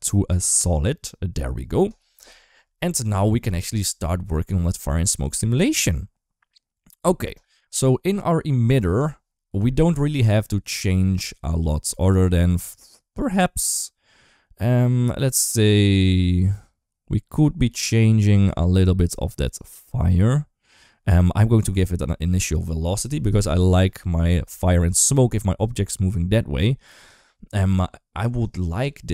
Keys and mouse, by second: 5.0-5.3 shift+middle drag, 12.9 click, 21.3 click, 25.5 d, 25.9 click, 26.9 d, 28.1 d, 28.2 right click.